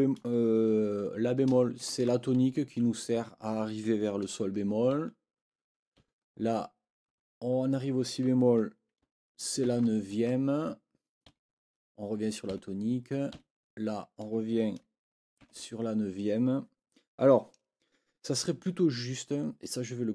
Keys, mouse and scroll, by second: 1.8 shift+t, 4.9 Right, 6.0 Right, 7.1 Right, 11.3 Right, 12.5 Right, 13.3 Right.